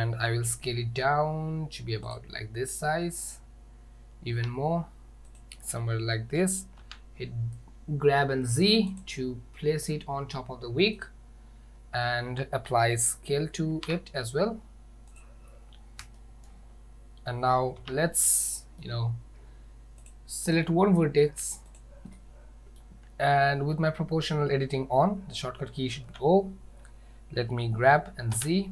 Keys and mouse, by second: 0.6 s, 4.4 s, 6.4 g, 9.9-10.8 middle drag, 13.8 ctrl+a, 16.2-16.5 shift+middle drag, 17.9 Tab, 18.4 middle click, 20.1 click, 21.7 click, 22.2 middle click, 26.1 o, 27.6 g.